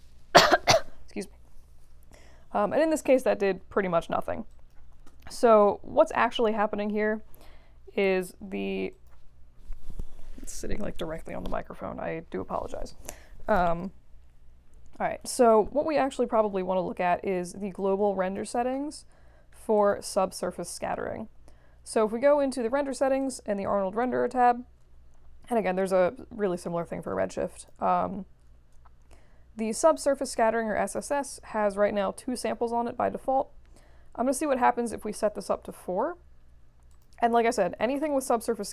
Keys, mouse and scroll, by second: 4.5 click, 4.8 1, 5.0 Return, 9.0 click, 17.7-18.3 drag, 19.7 click, 23.2 click, 27.4 click, 35.1 4, 35.6 Return, 36.9 click.